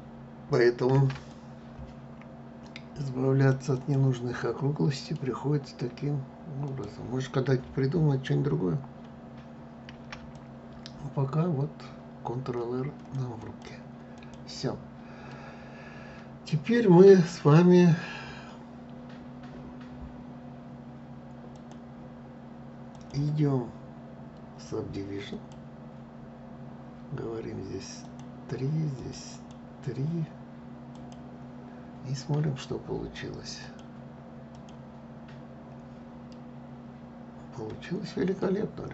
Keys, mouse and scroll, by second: 0.6 ctrl+r, 4.0-6.3 middle drag, 6.3 click, 9.6 ctrl+r, 13.8 click, 14.4-15.0 scroll down 1, 15.0-18.0 middle drag, 21.2 click, 22.6-25.6 drag, 27.7 click, 28.6 click, 30.6 click, 33.3-36.0 drag, 36.0-38.9 middle drag.